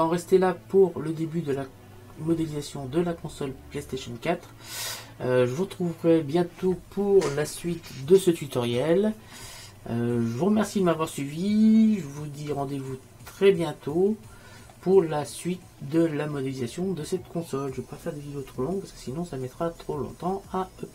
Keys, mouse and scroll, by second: 1.8-2.9 middle drag, 3.5 middle click, 12.7-14.6 middle drag, 16.1-19.3 middle drag.